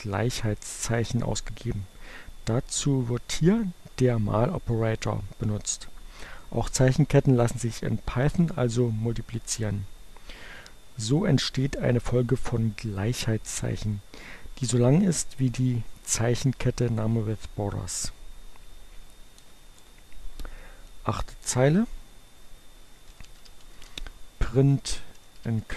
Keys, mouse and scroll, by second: 17.7 Return, 22.4-25.7 typing.